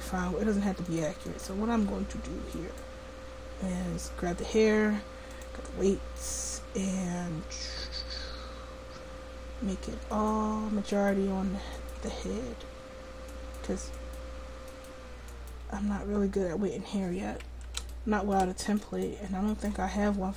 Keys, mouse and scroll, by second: 0.9 click, 1.4-2.6 drag.